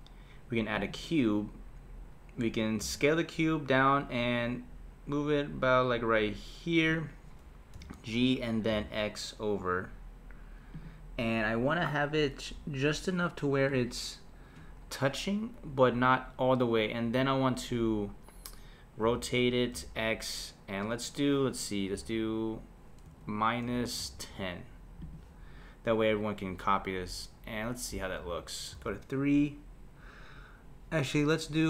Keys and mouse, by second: 2.2 middle click, 2.8 s, 7.7 g, 19.0 r, 28.7 KP_3.